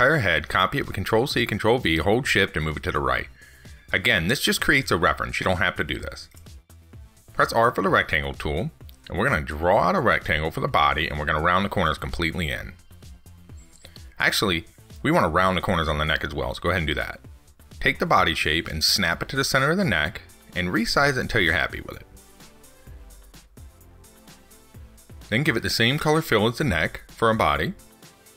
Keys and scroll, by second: 1.5 ctrl+c, 1.7 ctrl+v.